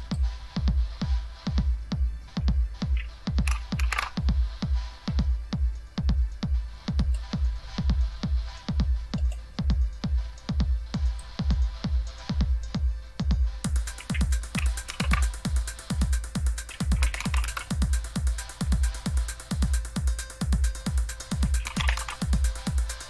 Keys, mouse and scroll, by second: 0.0 click, 3.7 shift+super+q, 7.0 click, 9.3 right click, 9.9 right drag, 11.0 click, 14.9 super+e, 16.7-17.6 typing, 21.3-23.0 typing.